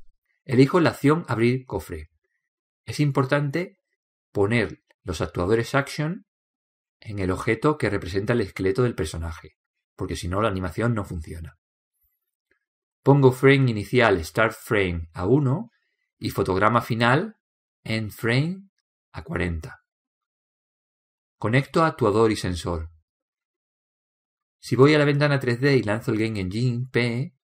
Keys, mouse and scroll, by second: 22.3-26.0 drag.